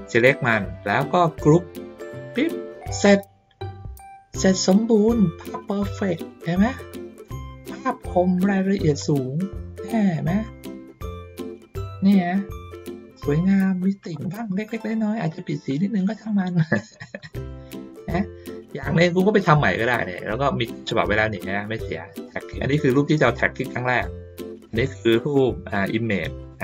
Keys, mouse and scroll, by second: 2.2 click, 5.1 ctrl+middle click, 5.5 ctrl+middle click, 5.8 ctrl+middle click, 6.2 ctrl+middle click, 7.7 ctrl+middle click, 8.5 middle click, 9.4 ctrl+middle click, 10.9 middle click, 12.5 ctrl+middle click, 13.6 ctrl+middle click, 14.1 middle click, 15.5 ctrl+middle click, 16.2 ctrl+middle click, 17.4 middle click, 18.0-19.3 ctrl+middle drag, 20.8 click, 21.3-22.3 drag, 23.1 ctrl+middle click, 24.5 click, 26.4 click.